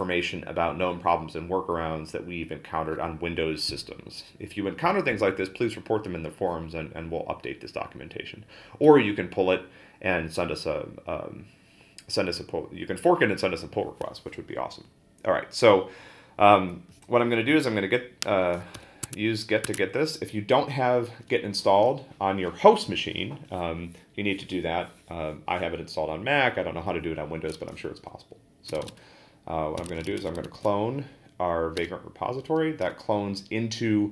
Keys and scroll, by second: 18.7 super+c, 19.0 Tab, 28.4-30.7 typing, 31.8 Return.